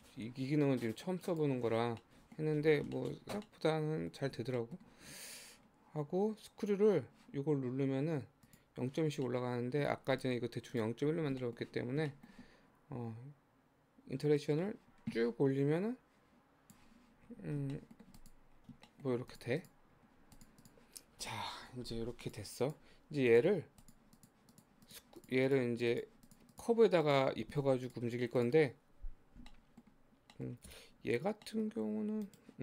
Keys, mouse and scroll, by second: 1.3 click, 1.9-3.0 scroll down 8, 2.0 middle click, 3.0 shift+middle click, 3.4 scroll up 1, 3.5-7.7 middle drag, 8.4 click, 9.3 middle click, 10.0 scroll up 1, 10.2 click, 10.7 click, 11.1-11.4 scroll down 2, 11.4-14.3 shift+middle drag, 14.3-17.3 drag, 17.3-17.7 scroll down 9, 17.7 shift+middle click, 18.2 click, 18.6-18.9 scroll down 3, 18.9 shift+middle click, 19.3 click, 19.6 click, 19.9-20.4 scroll up 1, 20.4 click, 20.6 click, 21.3 click, 22.3 click, 22.6 click, 23.1 scroll down 1, 23.3 click, 23.9 click, 24.2 click, 24.5 click, 24.9 click, 25.2 click, 25.5 click, 25.9 click, 26.3 click, 26.5 click, 27.0 click, 27.9 click, 28.4 click, 29.5-30.7 middle drag, 30.7 g.